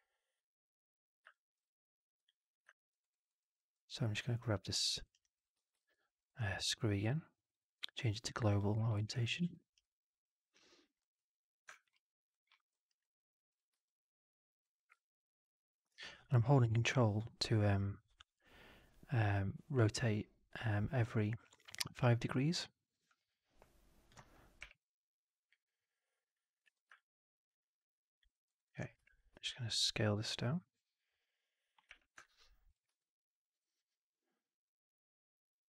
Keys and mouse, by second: 1.2 alt+middle drag, 2.2-2.6 drag, 2.6 alt+middle drag, 2.9 alt+right drag, 3.2 alt+drag, 3.5 alt+middle click, 4.8 alt+middle click, 4.9 alt+right drag, 5.1 alt+click, 5.5 w, 5.7 middle drag, 6.1 click, 7.4-8.7 drag, 8.8 alt+middle drag, 9.3 ctrl+d, 11.8-12.2 right drag, 12.4 alt+middle click, 12.6 alt+right click, 12.9 alt+click, 14.9-24.0 ctrl+drag, 24.5 w, 26.6 f, 26.9-28.1 alt+drag, 28.2 alt+middle drag, 28.4 alt+right drag, 28.6 alt+click, 28.9 4, 29.6 r, 31.8 w, 32.1 click, 32.8 e, 34.7-35.6 drag.